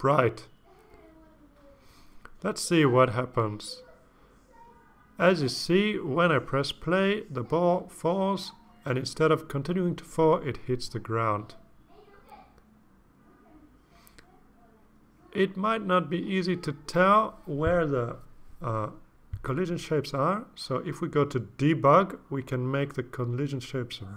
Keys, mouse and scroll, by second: 6.5 click, 13.0 click.